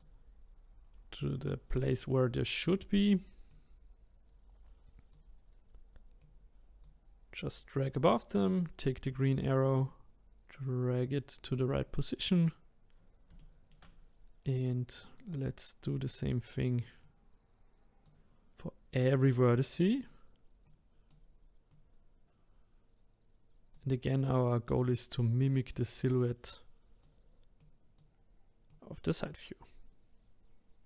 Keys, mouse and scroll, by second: 2.6 click, 3.5 click, 6.2 click, 9.1 click, 13.4-14.4 shift+middle drag, 14.4-17.1 drag, 19.1 click, 20.6 click, 21.7 click, 24.3 click, 25.7 click, 27.6 click, 28.7 click.